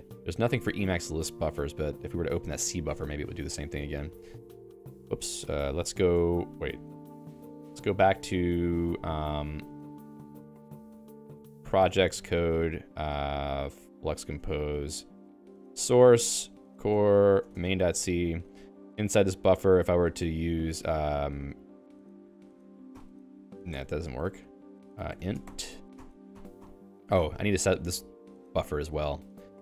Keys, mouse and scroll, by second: 0.4 Escape, 0.8 ctrl+s, 3.5 a, 3.7 BackSpace, 3.8 BackSpace, 4.2 Escape, 4.4 x, 4.5 ctrl+s, 5.2 ctrl+g, 5.3 Escape, 6.9 u, 7.3 ctrl+s, 8.2 ctrl+f, 9.6 alt+h, 9.8 alt+h, 10.4 alt+h, 10.6-14.5 typing, 15.3 ctrl+j, 15.4 ctrl+j, 15.8 Tab, 16.1 ctrl+j, 16.3 ctrl+j, 16.5 ctrl+k, 16.7 Tab, 17.0 ctrl+j, 17.2 ctrl+j, 17.6 Return, 17.8-20.1 typing, 20.3 Return, 21.8-25.6 typing, 26.1 ctrl+alt+i, 26.3 ctrl+alt+i, 26.7 ctrl+alt+i, 27.2 Escape, 27.6 ctrl+alt+j, 28.3 Return, 28.9-29.6 typing.